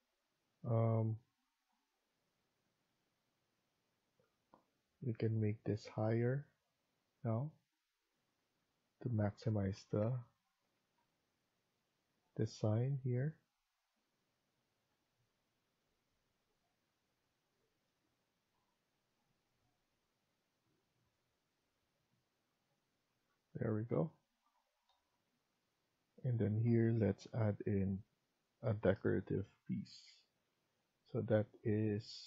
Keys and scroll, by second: 8.3 Escape, 10.0 a, 13.1-13.9 typing, 23.4 Escape, 27.0 Escape.